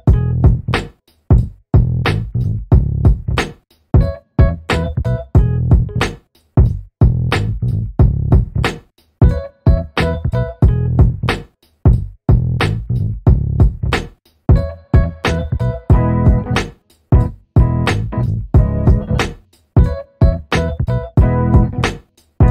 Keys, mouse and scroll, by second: 0.3 alt+middle click, 0.8 alt+click, 2.2 alt+middle click, 3.0 right click, 3.8 click, 5.5 right click, 5.9 click, 9.2 Escape, 9.8 alt+click, 11.2 click, 13.3 middle click, 14.1-14.6 scroll up 1, 14.6 scroll down 1, 14.8 alt+middle click, 15.6-16.0 scroll up 1, 16.0 alt+middle click, 16.6 click, 18.6-20.5 scroll up 1, 21.1 alt+middle click, 21.7 scroll down 1.